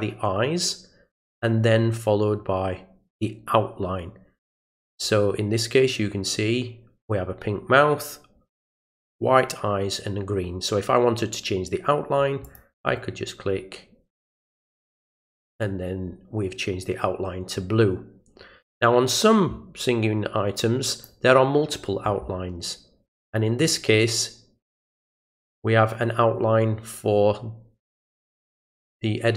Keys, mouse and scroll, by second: 12.4 click, 14.4 click, 15.2 click, 20.9 click.